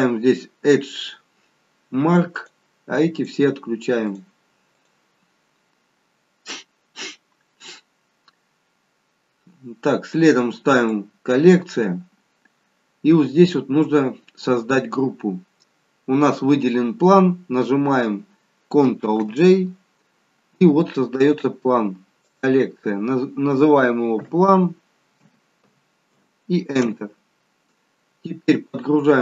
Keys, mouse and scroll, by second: 2.3 click, 3.1 click, 4.0 click, 4.7 click, 8.9-9.8 scroll down 1, 9.8-10.8 scroll down 2, 10.8 click, 13.0-13.7 scroll down 1, 13.7-16.0 scroll down 2, 19.2 ctrl+g, 22.1 click.